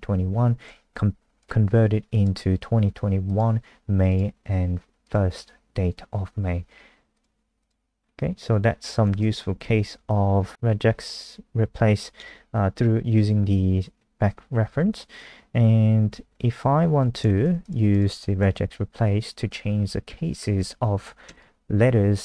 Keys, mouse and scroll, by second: 0.2 F5, 1.4 click, 8.0 scroll down 3, 9.5 Home, 9.6 Home, 10.4 Left, 10.5 shift+Down, 16.9 shift+End, 17.4 ctrl+c, 17.6 click, 17.9 click, 18.7 shift+Home, 18.9-19.8 shift+Up, 20.6 ctrl+v, 21.3 shift+click, 21.8 shift+Up, 21.9 shift+Right.